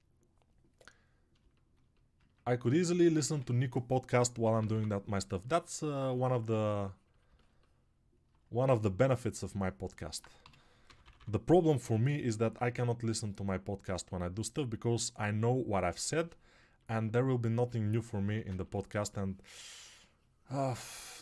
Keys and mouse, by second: 3.2 1, 4.4 [.